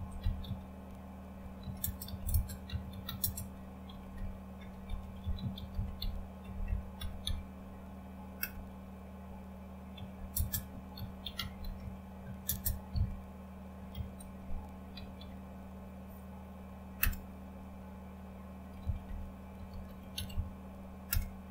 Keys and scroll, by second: 0.0-7.2 typing, 8.4 typing, 9.9-15.6 typing, 17.0 typing, 18.5-21.1 typing.